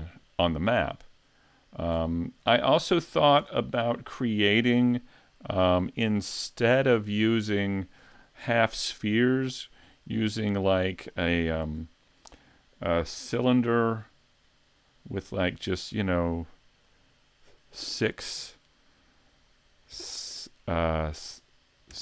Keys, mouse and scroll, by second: 1.9-2.5 scroll down 4, 2.4 scroll up 3, 2.9-3.4 scroll down 1, 3.4 Tab, 3.8-4.6 scroll down 1, 7.6 click, 9.1 scroll down 1, 11.6 shift+a, 16.9 click, 17.9 click.